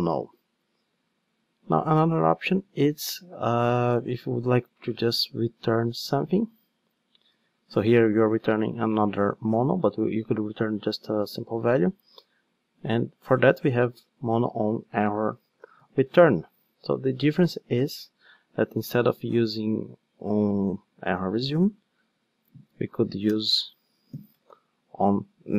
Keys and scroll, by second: 2.7 super+c, 7.3 super+v, 22.2 super+z.